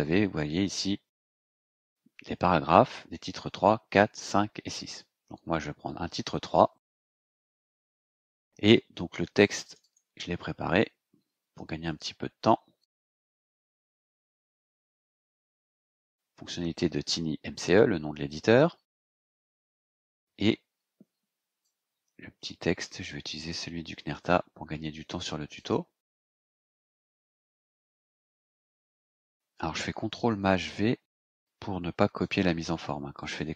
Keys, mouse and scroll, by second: 7.1 click, 9.4 click, 11.5 ctrl+c, 12.8 click, 14.3 ctrl+shift+v, 16.2 scroll down 2, 18.0 Return, 21.6-24.3 drag, 24.8 ctrl+c, 25.6 click, 26.4 scroll up 2, 27.2-28.0 scroll down 2, 28.0 click, 28.4 click, 28.9-29.7 ctrl+scroll up 1, 30.1 ctrl+shift+v, 32.2-33.5 drag.